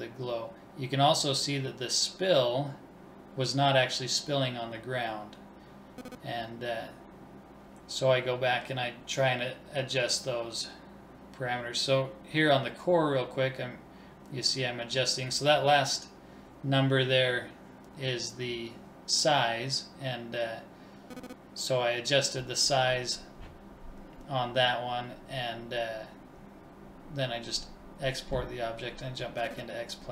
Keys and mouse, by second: 8.3-9.9 drag, 9.9 right click, 11.9-13.7 drag, 20.3 ctrl+s, 22.3-25.7 drag.